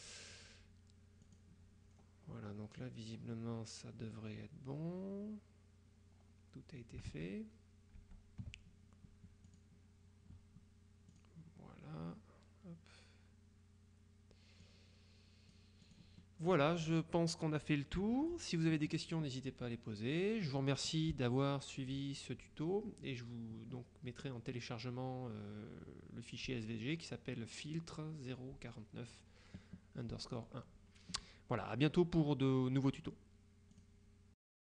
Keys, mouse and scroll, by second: 0.1 click, 1.4 click, 1.9-2.6 scroll down 2, 2.9-3.5 scroll down 2, 6.0-6.8 scroll up 2, 7.2 alt+Tab, 8.1 Tab, 9.5 click, 11.2 click, 14.7-16.5 drag, 33.9 click.